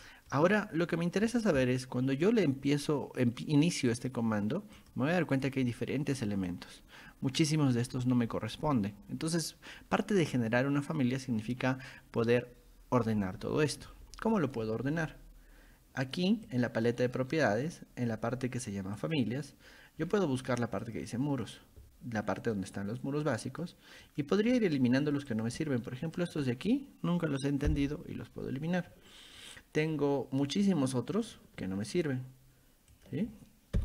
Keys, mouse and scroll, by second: 0.1 scroll up 1, 3.9 click, 4.8 click, 6.5-13.5 drag, 16.5 click, 19.0 click, 20.0-20.3 scroll down 1, 20.8 click, 21.5 click, 22.4 click, 23.5 click, 24.0 click, 25.3 click, 26.2 shift+click, 31.1 click, 32.9 shift+click.